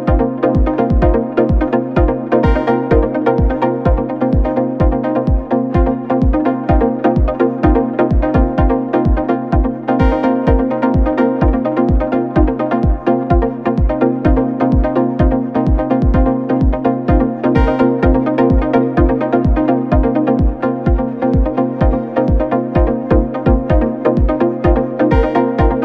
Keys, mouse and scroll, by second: 1.1 scroll up 1, 1.6-3.6 drag, 4.8 click, 6.9-8.7 drag, 8.7 scroll down 1, 8.9 scroll up 1, 9.1 middle click, 9.9 click, 10.2-10.7 scroll down 1, 10.7 click, 11.2-12.1 middle drag, 12.1-12.6 scroll up 1, 12.7 click, 13.1-13.8 middle drag, 13.8-18.0 drag, 18.3 scroll down 2, 18.7-21.8 middle drag, 21.8-25.8 drag.